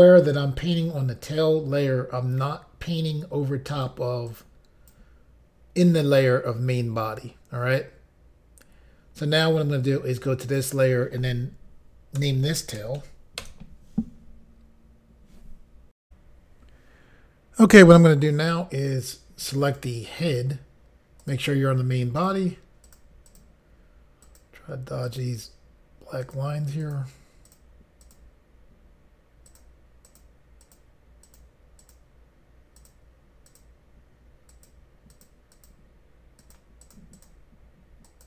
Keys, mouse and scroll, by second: 4.3 click, 10.5 click, 10.7 click, 10.8 double click, 12.2-13.4 typing, 13.4 Return, 16.0 Pause, 19.6 click, 21.2 click, 22.2 click, 22.9 click, 23.3 click, 23.4 double click, 24.2 double click, 25.1 click, 26.2 click, 26.8 click, 27.5 click, 28.0 click, 29.5 click, 30.1 click, 30.6 click, 31.2 click, 31.8 click, 32.8 click, 33.5 click, 34.5 click, 35.1 click, 35.5 click, 35.7 double click, 36.4 double click, 36.8 double click, 36.9 double click, 37.1 double click, 38.1 double click.